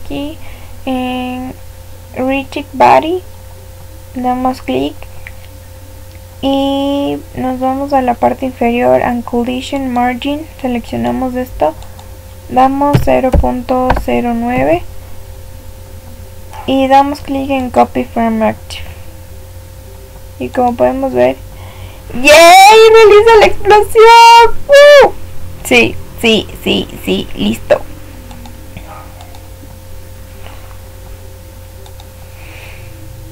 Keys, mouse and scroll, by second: 2.5-5.1 scroll up 1, 5.1-6.1 scroll up 1, 6.1-9.7 scroll up 1, 9.7-12.7 drag, 20.5 click, 28.2-31.0 drag.